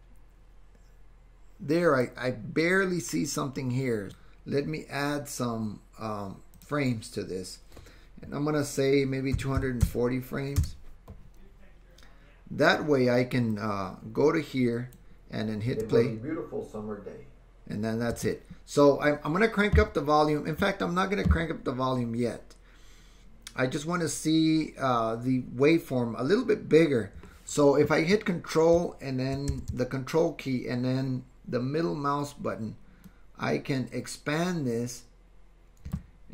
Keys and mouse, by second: 4.1 click, 4.1 space, 6.6-11.6 drag, 13.7-18.4 drag, 15.7 space, 18.2 space, 33.1-36.0 ctrl+drag, 36.0 middle click.